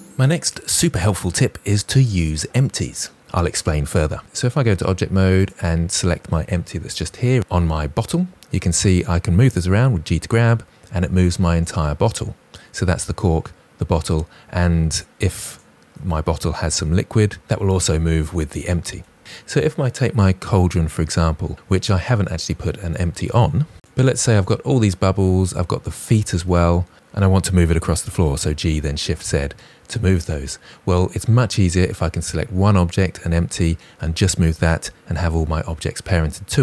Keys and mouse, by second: 4.2 Tab, 5.1 click, 6.4 KP_Decimal, 9.6 g, 16.3 g, 20.7 click, 21.2 KP_Decimal, 23.7 shift+click, 23.9-25.1 shift+drag, 25.3 shift+drag, 25.9 shift+click, 26.2 middle click, 28.4 g, 28.8 shift+z, 28.9 g, 30.1 middle click.